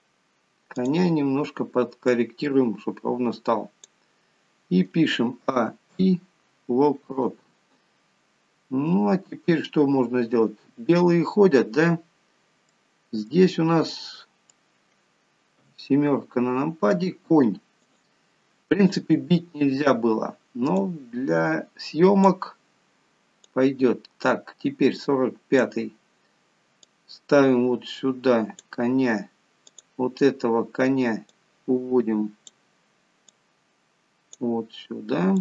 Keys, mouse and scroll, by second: 1.1 click, 2.4 click, 5.7 a, 6.2 i, 8.2-8.8 scroll down 2, 8.9 scroll down 2, 11.6-12.0 scroll up 3, 12.8 scroll down 1, 13.0 middle click, 14.3 middle click, 15.9 KP_7, 18.1 click, 21.1 click, 23.8 click, 27.2 click, 30.0 click, 31.6 click, 33.7 click.